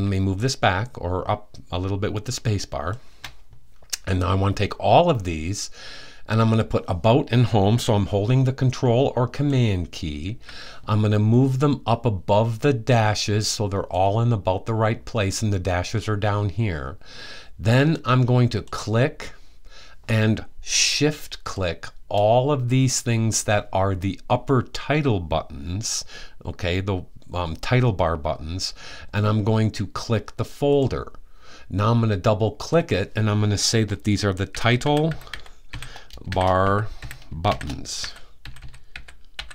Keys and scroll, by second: 33.9-39.5 typing.